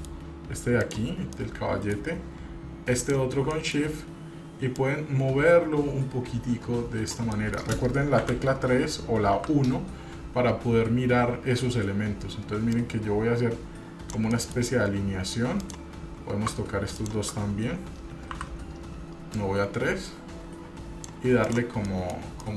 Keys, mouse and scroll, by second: 0.0 middle click, 1.0 click, 1.6 middle click, 3.1 shift+click, 3.7 middle click, 4.9-7.4 drag, 7.6 middle click, 8.4 KP_3, 9.5 KP_1, 12.9-14.3 drag, 14.5 middle click, 14.9-15.7 scroll up 2, 15.8 click, 17.2 shift+click, 18.4 KP_1, 19.5-21.3 drag, 21.6 click, 22.0 middle click, 22.3 scroll down 1.